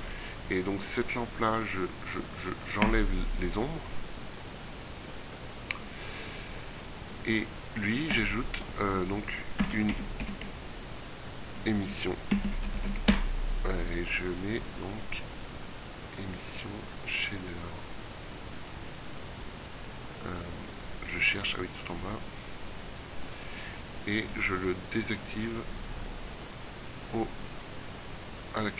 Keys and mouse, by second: 10.9 s, 28.6-28.7 drag.